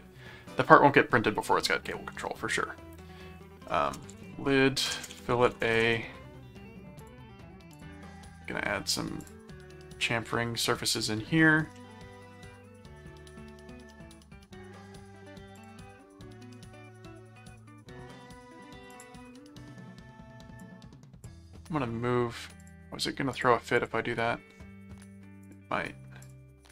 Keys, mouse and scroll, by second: 3.6-6.2 typing, 7.0 click, 7.7 click, 9.2 click, 10.9 click, 11.8-13.0 middle drag, 13.9 middle click, 15.6 click, 18.9 click, 20.6 click, 22.6 click, 23.3 click, 25.5 click, 26.2 click.